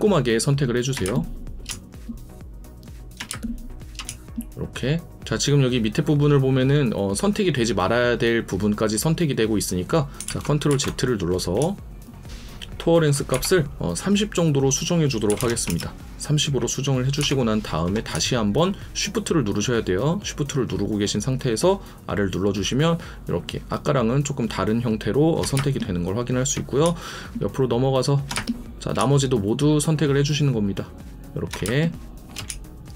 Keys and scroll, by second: 1.0 shift+space, 3.3 shift+space, 10.2 ctrl+z, 25.5 shift+space, 28.3 shift+space, 31.6 shift+space.